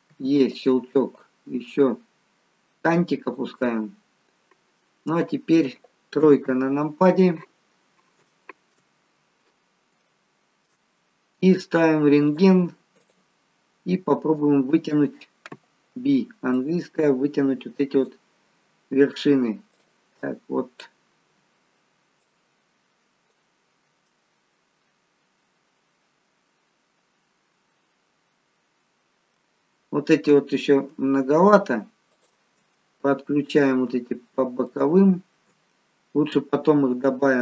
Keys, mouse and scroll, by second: 0.1 e, 1.2 click, 4.4-4.8 scroll up 1, 4.8 middle click, 6.1 KP_3, 7.4-8.2 scroll down 2, 8.3 shift+middle click, 8.8-9.6 scroll up 1, 9.6 scroll up 3, 10.0 shift+middle click, 12.3 click, 12.9 click, 15.0 click, 15.8 b, 19.7 click, 20.1 click, 21.3 b, 24.0 middle click, 32.1 shift+click, 32.6 middle click, 34.6 shift+click, 35.6 middle click.